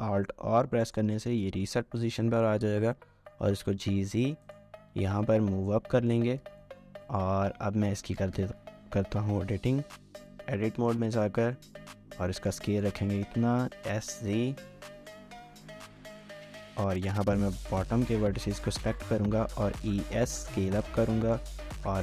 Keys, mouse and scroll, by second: 0.5 alt+g, 2.7-3.3 typing, 5.1-6.2 typing, 5.5 scroll up 1, 6.0 shift+middle click, 6.3 scroll up 1, 6.6 shift+middle click, 6.9 scroll up 1, 7.3-8.0 scroll, 8.0-8.4 typing, 8.2-12.5 drag, 12.7 shift+middle click, 13.2-14.2 typing, 16.4 shift+middle click, 16.7 typing, 17.4 double click, 18.8-19.9 typing, 21.8-22.0 typing.